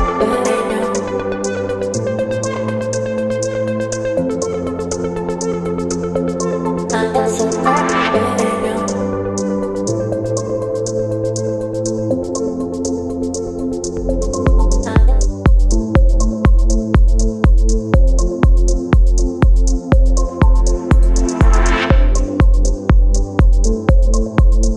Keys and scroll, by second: 0.7-1.6 typing, 2.9 space, 8.2 space, 11.4 space, 14.7 space, 19.5 space, 23.4 space.